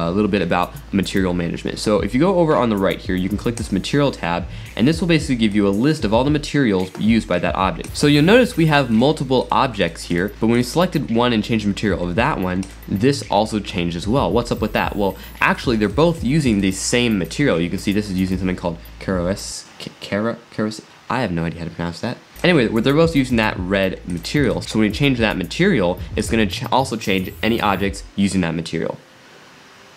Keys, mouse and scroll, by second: 3.6 click, 5.5-7.8 drag, 8.1 click, 8.9 drag, 9.4 drag, 9.8 drag, 10.1 drag, 12.6 click, 14.6 scroll up 2, 15.5 drag, 15.9 drag, 16.6 click, 17.3 click, 22.3 click, 24.1 drag, 26.2 click.